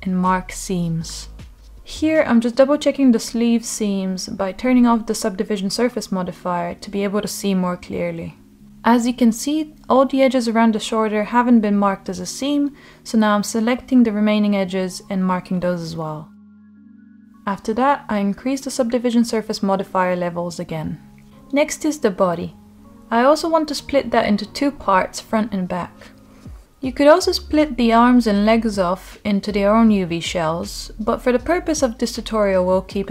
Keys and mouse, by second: 0.4-2.0 right drag, 2.8-3.2 middle drag, 5.2 click, 6.0 click, 6.9 Tab, 8.2 click, 8.7 middle click, 9.6 shift+click, 9.9 middle click, 10.8 shift+click, 11.2 middle click, 12.0 shift+click, 12.3 middle click, 13.1 middle click, 13.5-14.0 right drag, 14.2 middle click, 15.1 click, 15.4-16.3 middle drag, 18.2 click, 19.0 middle click, 19.8 Tab, 22.9 shift+h, 24.2 Tab, 26.4-27.1 middle drag, 28.0-28.4 shift+drag, 28.7-30.0 middle drag, 30.8 shift+click, 31.7-32.8 middle drag.